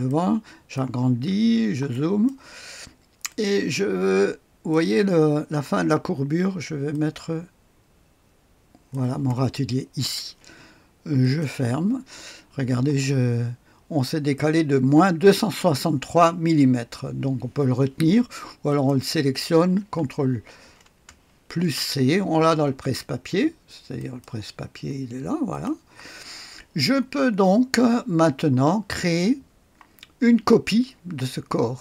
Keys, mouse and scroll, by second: 0.0 click, 1.0-1.8 scroll up 2, 1.8 click, 3.2-4.6 drag, 6.8-8.8 drag, 11.1 click, 18.6 click, 21.5 ctrl+c, 23.9 click, 25.5 click, 27.7-28.8 scroll down 1.